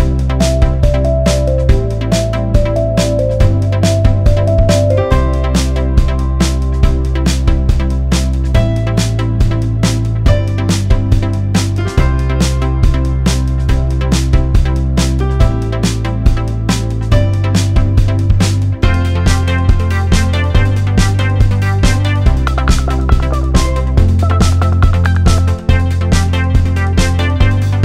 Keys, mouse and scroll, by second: 0.2 click, 2.7 right click, 3.2 click, 5.1 click, 6.4 click, 11.0 double click, 11.5 click, 12.2 6, 12.6 0, 13.5 click, 14.5 double click, 14.9 click, 15.3 0, 16.1 click, 17.9 right click, 18.5 click, 20.3 click, 20.6-20.9 alt+scroll up 1, 22.2 click, 23.8 click, 25.9 alt+scroll up 1, 26.4 click.